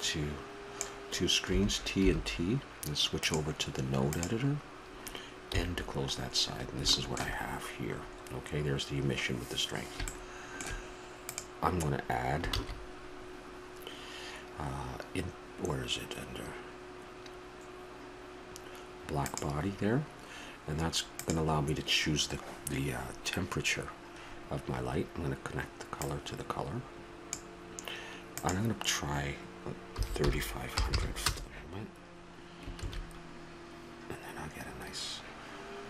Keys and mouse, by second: 1.5 t, 1.9 t, 3.1 click, 7.9 n, 12.4 shift+a, 31.6 0, 33.3 shift+z.